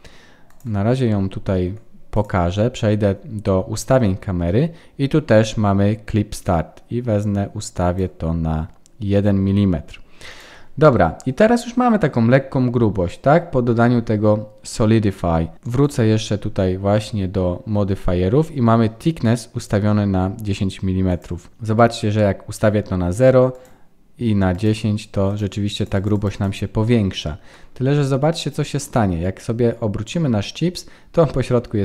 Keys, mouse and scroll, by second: 0.5 click, 2.1 click, 6.4 click, 10.3 click, 10.9 middle click, 12.5 scroll up 1, 15.8 click, 21.1 click, 23.5 click, 25.2 click, 25.7 click, 25.9 click, 26.1 click, 26.3 click, 27.7-28.3 scroll down 3, 28.3 middle click.